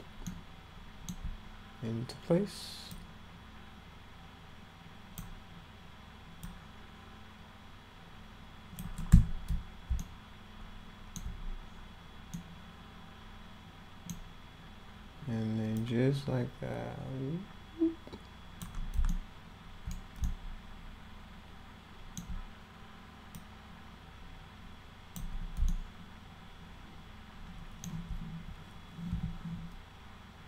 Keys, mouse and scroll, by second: 0.3 alt+middle click, 3.0-5.2 drag, 6.5-8.8 drag, 10.0-11.2 alt+middle drag, 12.4-14.1 middle drag, 15.8-18.6 drag, 19.1 alt+middle click, 20.3-22.2 alt+middle drag, 23.4-25.2 drag, 25.7-27.8 alt+middle drag, 29.2 e, 29.4-29.8 scroll up 2.